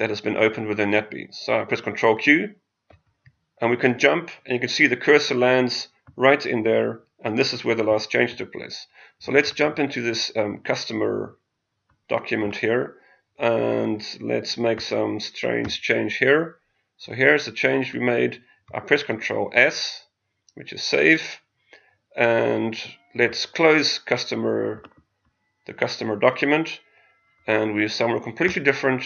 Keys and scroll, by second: 2.9 ctrl+q, 18.6 ctrl+s.